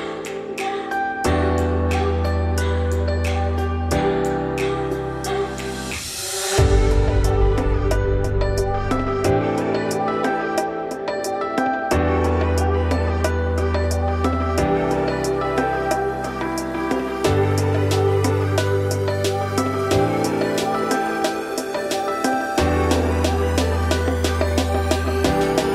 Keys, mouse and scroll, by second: 0.0 e, 2.4 click, 3.1 g, 5.2 scroll down 1, 5.4 z, 6.7 scroll down 1, 6.8 Tab, 7.3 shift+click, 7.6 Tab, 7.9 scroll up 1, 8.1 z, 8.5 click, 9.5 shift+click, 10.4 g, 11.3 z, 11.7-12.5 scroll down 4, 12.5-13.5 scroll up 2, 13.5 g, 16.8 shift+middle click, 17.6 Tab, 18.3 click, 18.6 middle click, 19.3 ctrl+s, 19.6 scroll down 2, 19.8-22.5 middle drag, 22.5 `, 23.3-23.7 scroll up 2, 23.7 middle click, 24.3 click, 24.8 middle click, 25.1 Tab, 25.5 click.